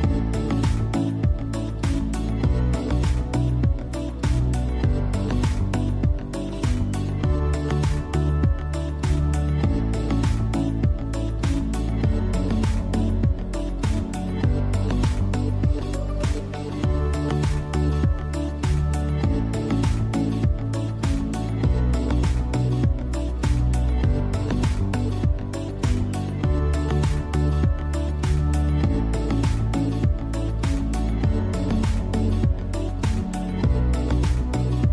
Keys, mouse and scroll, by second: 1.2-10.4 drag, 13.5 x, 16.4 ctrl+x, 18.0 scroll up 1, 19.2 b, 20.1-24.7 alt+right drag, 24.7 click, 26.5 alt+right click, 27.2-29.0 drag, 29.0 alt+right click, 29.5 click, 30.0 scroll down 1, 31.1 click, 32.1 scroll down 1, 32.8 scroll up 1, 33.6-34.9 drag.